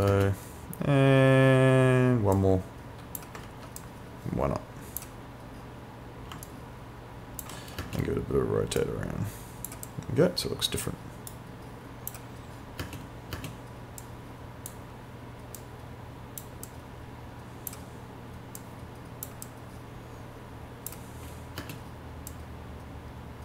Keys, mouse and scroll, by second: 0.1 space, 2.4 click, 3.5 ctrl+z, 3.8 click, 6.5 alt+click, 7.8 space, 8.8 click, 10.9 right click, 11.3 click, 12.9 space, 14.0 click, 21.6 space, 22.3 click.